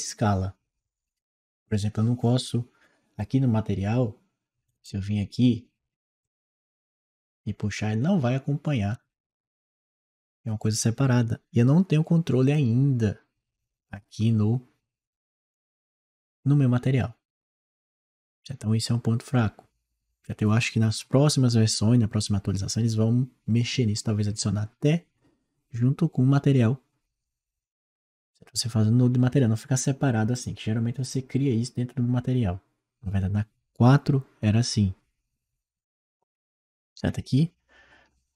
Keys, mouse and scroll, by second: 4.5 click, 4.7 click, 6.1-11.3 drag, 12.4 click, 15.3 click, 15.5 click, 36.8-37.8 scroll down 2.